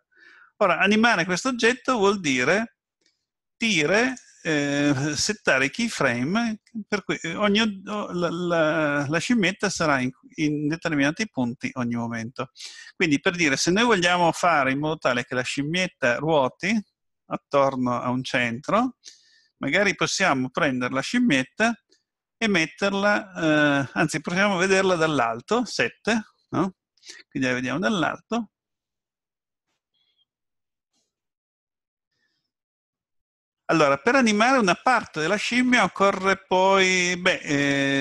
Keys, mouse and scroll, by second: 4.1 click, 13.6-16.9 scroll down 3, 23.0 middle click, 25.2 KP_7.